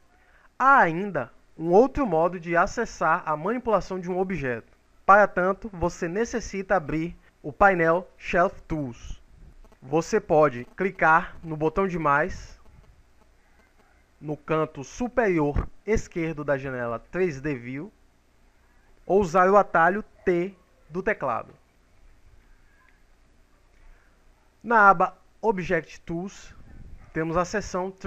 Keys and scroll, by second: 20.2 t.